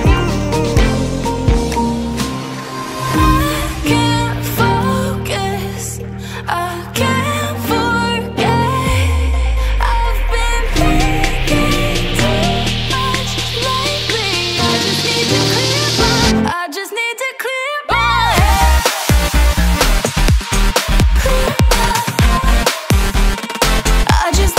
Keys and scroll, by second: 1.1 ], 5.1 [, 11.8 typing, 14.1 ctrl+a, 22.1 space, 23.9-24.4 typing.